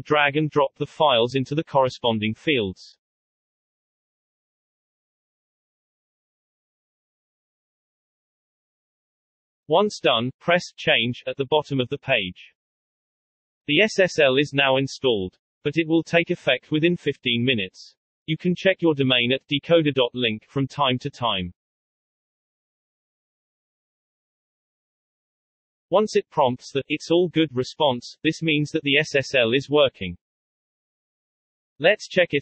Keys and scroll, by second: 0.8 ctrl+v, 6.8 alt+Tab, 23.9-26.3 typing.